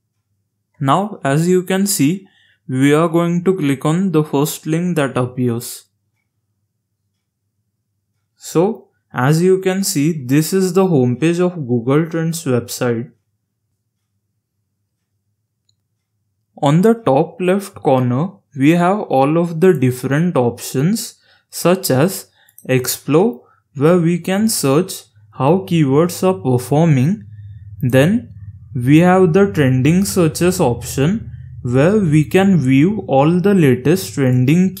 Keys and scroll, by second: 0.0-1.1 typing.